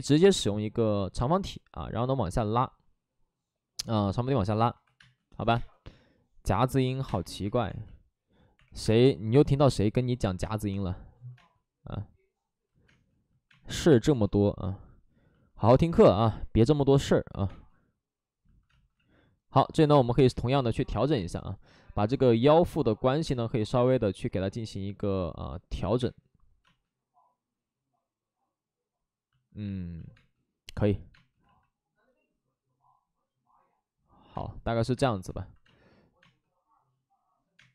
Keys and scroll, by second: 1.4 w, 4.8 2, 4.9 space, 5.3 x, 5.5 space, 6.8 2, 7.0 space, 7.4 2, 8.8 space, 17.3 ctrl+z, 17.4 space, 18.9 ctrl+z, 20.2 space, 30.1 space, 31.1 space, 31.4 ctrl+z, 34.3 space, 34.9 space, 35.6 space, 37.5 space.